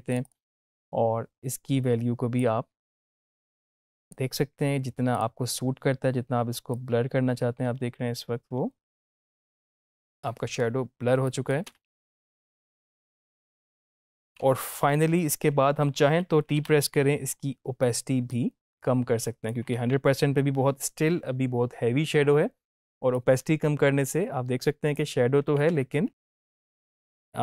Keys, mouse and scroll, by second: 0.0-3.5 drag, 11.6 space, 14.3 space, 16.5 t, 18.2-19.5 drag, 19.7 ctrl+z, 23.1-25.4 drag, 25.6 space, 26.7 click.